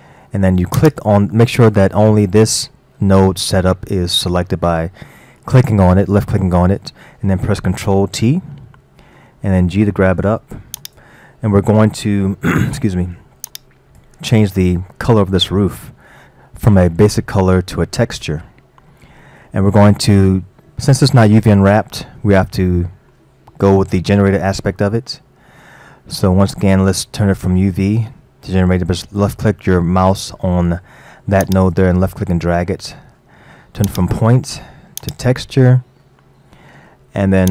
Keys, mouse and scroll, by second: 0.8 click, 8.3 ctrl+t, 9.5 g, 13.5-14.4 drag, 14.4-18.8 middle drag, 18.9-21.9 middle drag, 24.6-25.4 scroll up 5, 25.4-28.5 middle drag, 31.5 click, 33.9-36.0 drag, 36.0-37.5 middle drag.